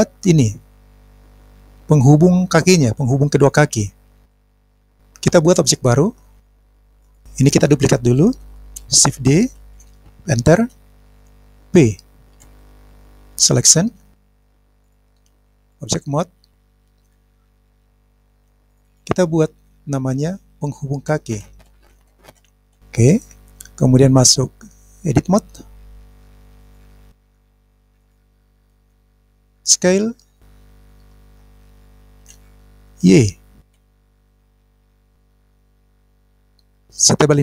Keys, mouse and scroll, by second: 6.6 click, 9.6 shift+d, 10.6 Return, 12.4 p, 21.9 click, 22.1 k, 27.1 click, 28.0 click, 32.3 s, 33.7 y, 36.6 click.